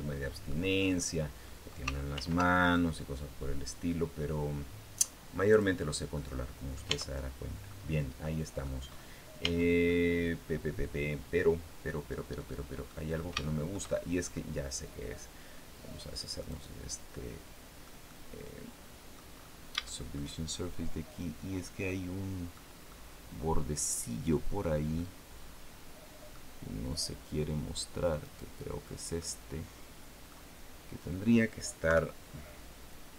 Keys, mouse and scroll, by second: 0.8 scroll up 1, 1.9 ctrl+r, 2.4 ctrl+click, 5.3 click, 5.9 scroll down 1, 6.0 middle click, 6.7 Tab, 7.2-7.5 scroll down 1, 7.5-8.6 middle drag, 8.6-9.0 scroll up 1, 9.2 Tab, 9.6-12.8 middle drag, 12.9 scroll up 2, 13.2 shift+middle click, 13.7 shift+scroll up 2, 16.2 click, 16.9 middle click, 17.9-19.1 middle drag, 19.1-19.6 scroll up 1, 19.6 shift+middle click, 21.6 middle click, 22.7-24.6 middle drag, 24.8-26.3 middle drag, 28.0 right click, 28.6-29.0 scroll down 2, 29.0-30.2 middle drag, 31.6 KP_3, 32.7 click.